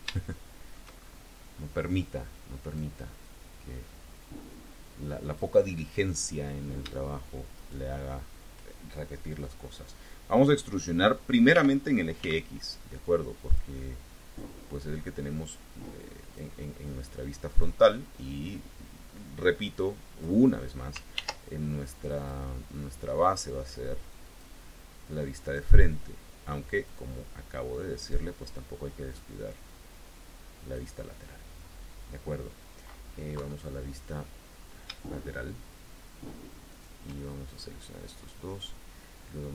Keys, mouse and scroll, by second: 0.0 shift+click, 0.9-1.4 shift+scroll up 1, 2.4 click, 3.0-5.4 drag, 7.4 shift+click, 11.4 e, 12.0 x, 13.3 click, 14.2-16.4 drag, 18.2-20.2 drag, 21.0 ctrl+r, 22.0 click, 24.1 click, 25.2 click, 25.8-26.9 drag, 27.8 click, 29.0-30.8 drag, 31.6-31.9 scroll down 2, 33.2 KP_3, 36.6 shift+click, 37.1 shift+scroll up 2, 38.1-39.5 drag.